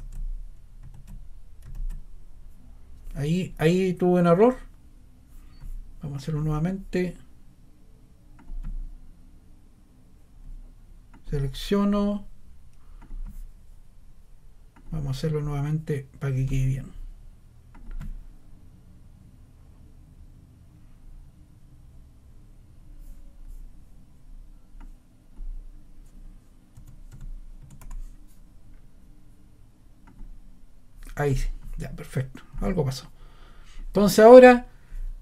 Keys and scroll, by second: 0.9 super+z, 1.7 super+z, 26.5-28.3 typing.